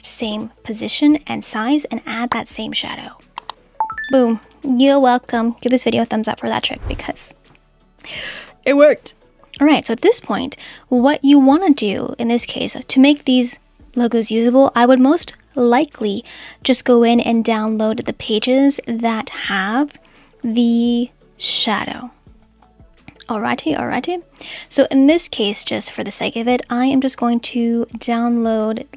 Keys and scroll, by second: 8.3 Delete.